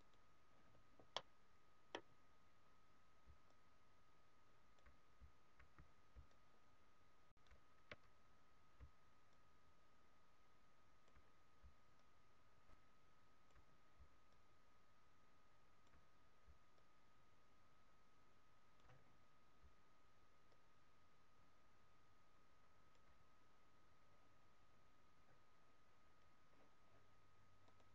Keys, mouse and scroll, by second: 1.1 middle click, 3.3 d, 3.4 click, 4.8 d, 6.1 d, 6.2 right click, 8.7 d, 9.3 click, 11.8 click, 13.6 d, 14.3 click, 16.7 click, 20.5 click, 20.5 d, 27.6 click.